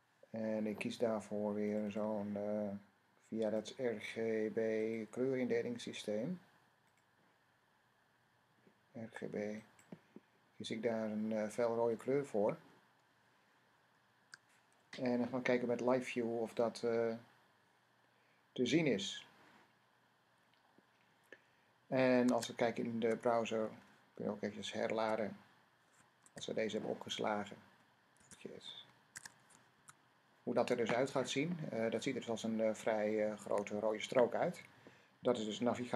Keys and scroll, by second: 14.0 ;, 22.1 Tab, 24.8 r, 26.0 Tab, 28.0 s, 29.0 Tab, 29.6 r.